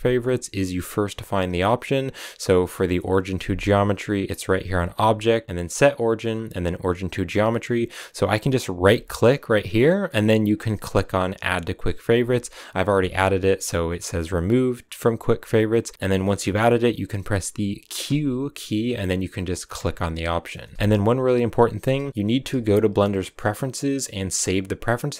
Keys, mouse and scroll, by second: 19.9 q, 20.4-25.1 shift+middle drag.